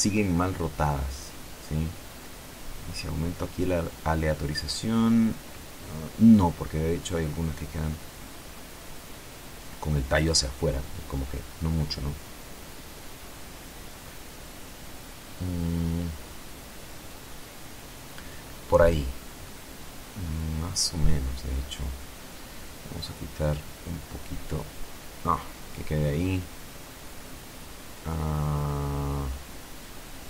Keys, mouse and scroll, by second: 2.2-7.5 drag, 7.5 scroll up 2, 7.6 click, 9.0 click, 10.2-12.1 drag, 12.5 click, 17.0 click, 18.6-19.0 scroll down 1, 19.0-21.4 middle drag, 22.3-25.6 drag, 26.3-30.2 drag.